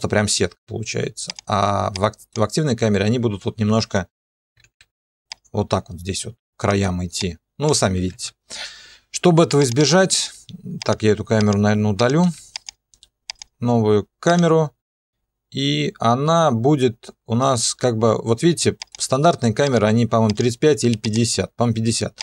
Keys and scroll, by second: 4.8 ctrl+2, 8.0 ctrl+2, 12.2 Delete.